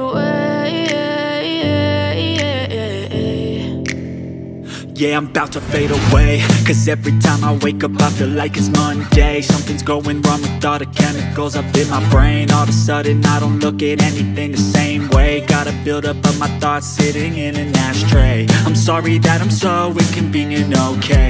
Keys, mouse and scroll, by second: 5.8 shift+click, 20.9 double click.